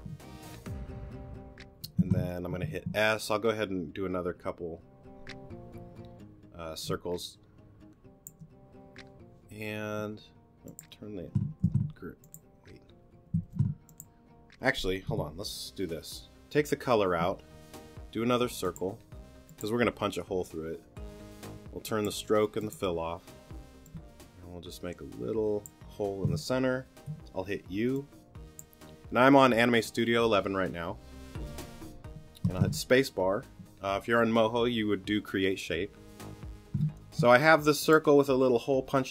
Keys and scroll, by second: 2.0 s, 11.6 q, 13.4 super+z, 15.1 BackSpace, 27.1 alt+shift+u, 32.4 space, 36.8 t.